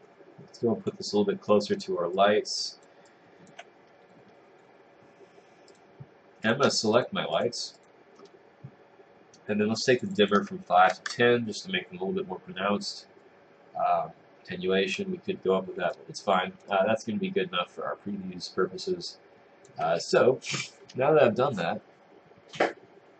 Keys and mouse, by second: 2.2 click, 3.1 click, 11.2 Return, 16.1 click, 16.7 click.